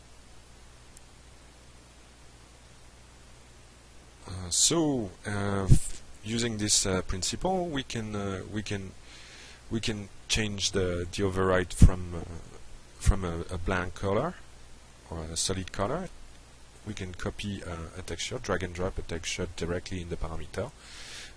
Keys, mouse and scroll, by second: 2.5 click, 4.6 click, 12.0 alt+Tab.